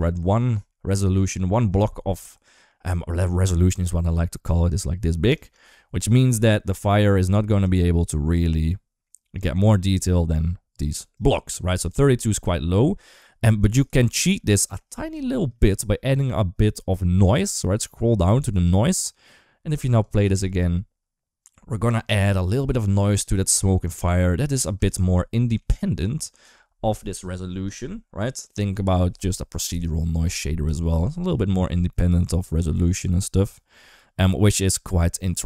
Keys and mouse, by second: 0.3 KP_1, 0.7 KP_3, 2.2 shift+middle click, 4.3 d, 4.5 click, 5.3 d, 7.2 d, 7.4-9.5 drag, 9.5 d, 10.8 d, 10.9-13.6 right drag, 13.7 d, 13.9 middle click, 14.3 shift+middle click, 15.0 shift+middle click, 19.8 click, 20.1 space, 24.6 space, 24.9-25.4 middle drag, 30.1 KP_1, 30.5 KP_3.